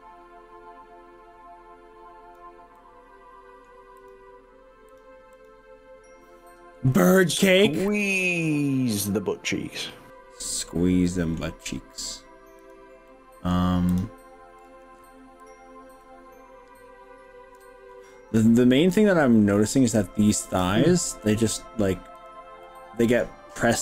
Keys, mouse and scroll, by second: 2.9 middle click, 4.1 click, 4.9 click, 5.3 click, 7.3-11.4 middle drag, 11.9 click, 13.1 middle click, 13.9 click, 14.7 click, 15.5 click, 16.1-18.1 middle drag, 18.1-19.9 middle drag, 20.5 click, 21.2 middle click, 22.3 click, 22.7 middle click.